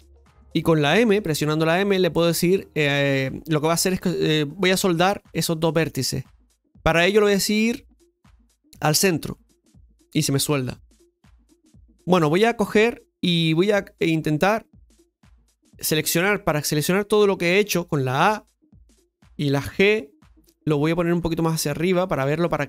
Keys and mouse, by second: 13.7 middle click, 18.0 a, 21.0 g.